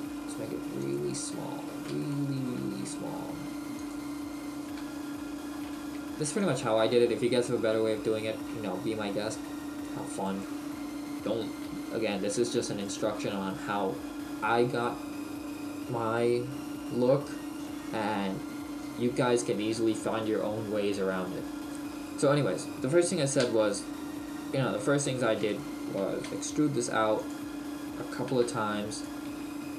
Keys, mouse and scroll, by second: 0.9 click, 1.2-2.1 scroll up 5, 2.1 shift+middle click, 2.7 s, 3.9 click, 4.1-4.7 scroll up 1, 5.0 scroll up 3, 5.1 shift+middle click, 5.7 s, 6.6 click, 10.2 right click, 11.7 h, 12.9 right click, 24.5-25.0 scroll up 1, 25.2 right click, 25.2 scroll up 1, 26.2 shift+right click, 26.2 e, 27.3 click, 28.3 e, 29.0 click, 29.3 e.